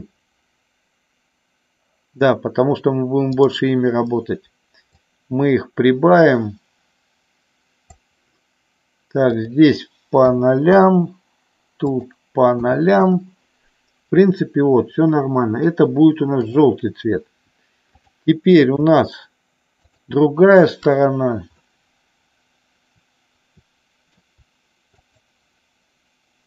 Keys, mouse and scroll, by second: 3.3 click, 4.8-8.1 drag, 9.4-10.9 drag, 11.9-13.3 drag, 16.5 click, 18.1-19.4 drag, 22.5-24.4 middle drag.